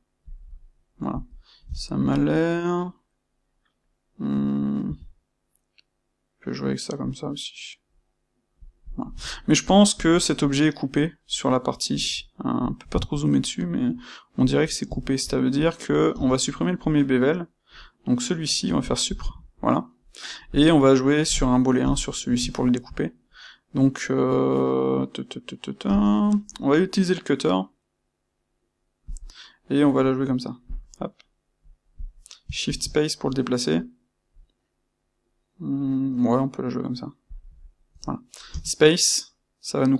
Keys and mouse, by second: 8.8 click, 9.9 click, 10.0-15.8 middle drag, 15.8 click, 16.0 space, 20.5 click, 21.8 KP_1, 22.4 shift+middle click, 25.8 space.